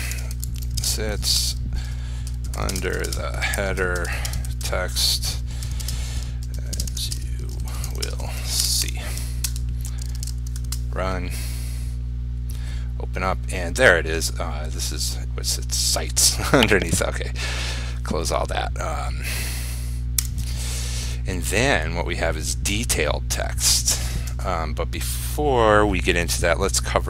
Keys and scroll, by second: 10.2 ctrl+s, 10.9 ctrl+r.